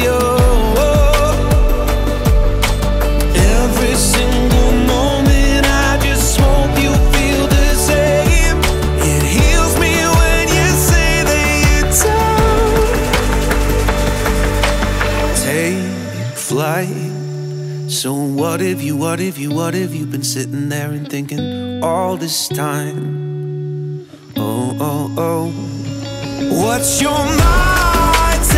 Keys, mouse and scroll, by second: 0.9-2.6 drag, 3.6 scroll down 8, 3.7-4.1 scroll up 1, 4.1 middle click, 4.5-5.5 scroll down 7, 5.5 click, 6.7-9.5 drag, 9.5 middle click, 10.0-10.5 scroll up 11, 10.5-13.9 middle drag, 13.9 click, 14.3 scroll down 4, 14.6-15.8 middle drag, 15.8-17.1 drag, 18.1 click, 19.2 click, 20.4-21.3 middle drag, 21.3 click, 23.4 click, 24.2-25.5 middle drag, 26.6-27.6 drag, 27.6-28.1 middle drag, 28.1-28.5 scroll up 8.